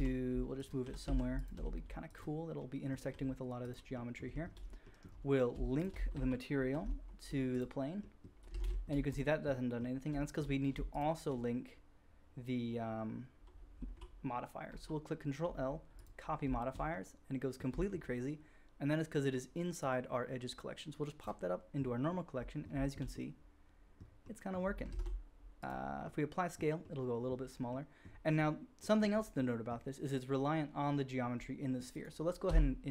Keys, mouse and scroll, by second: 0.8 g, 1.5 s, 3.1 g, 4.2 shift+middle drag, 5.4-5.9 shift+middle drag, 6.5 ctrl+l, 8.5 alt+a, 8.9-10.0 drag, 9.0 middle click, 9.0 right click, 10.9 shift+click, 14.6 ctrl+l, 16.4-19.8 shift+drag, 19.8-21.2 middle drag, 21.2-25.8 drag, 24.8 ctrl+a, 25.8-29.0 middle drag, 29.0-29.7 right drag, 29.7-31.6 middle drag, 31.6-32.4 right drag, 32.4 Tab.